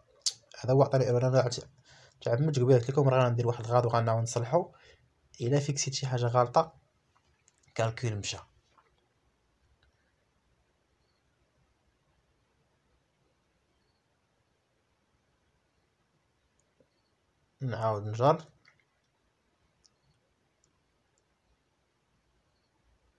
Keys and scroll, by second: 1.4 Escape, 6.0 Escape, 15.1 F4.